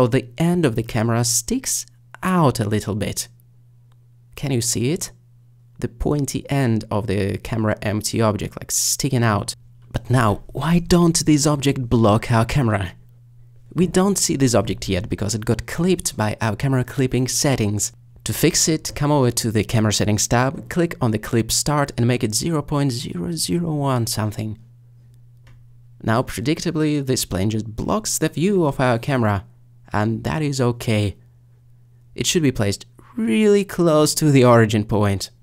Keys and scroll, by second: 21.9 0, 23.0 0, 23.8 1, 24.3 Return, 27.8 g, 28.2 z.